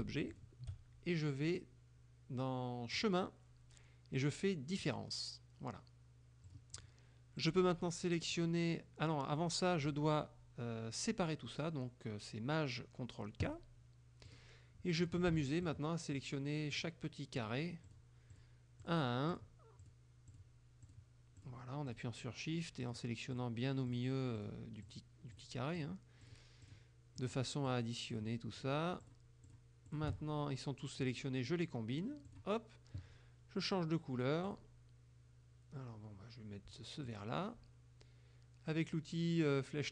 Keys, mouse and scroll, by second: 0.3 shift+click, 3.0 click, 4.8 click, 6.5 click, 7.5 click, 10.0 click, 13.5 click, 14.3 click, 15.1 click, 15.7 shift+click, 16.2 shift+click, 16.8 shift+click, 17.5 shift+click, 17.9 shift+click, 18.4 shift+click, 18.9 shift+click, 19.4 shift+click, 19.9 shift+click, 20.4 shift+click, 20.9 shift+click, 21.5 shift+click, 22.0 shift+click, 22.9 shift+click, 23.4 shift+click, 23.9 shift+click, 24.4 shift+click, 24.9 shift+click, 25.4 shift+click, 25.8 shift+click, 26.3 shift+click, 26.7 shift+click, 27.2 shift+click, 27.7 shift+click, 28.2 shift+click, 28.7 shift+click, 29.1 shift+click, 29.5 shift+click, 29.9 shift+click, 31.1 click, 32.4 click, 34.5 click, 37.1 click.